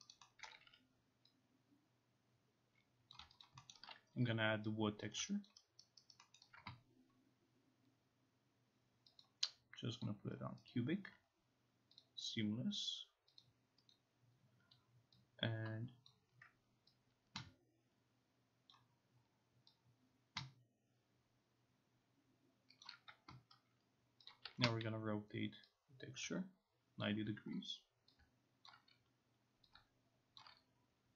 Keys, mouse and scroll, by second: 0.5 alt+middle click, 0.7 e, 3.2 click, 3.5 alt+click, 3.8 alt+middle click, 5.1 click, 5.5 alt+click, 5.9 alt+right click, 6.1 alt+right click, 6.4 alt+middle click, 9.3 click, 10.1 click, 10.7 alt+right click, 12.1 click, 13.5 click, 13.9 click, 16.1 click, 18.7 click, 22.9 click, 24.3 click, 24.5 r, 27.1 shift+click, 28.2-29.4 shift+drag, 29.8-31.1 shift+drag.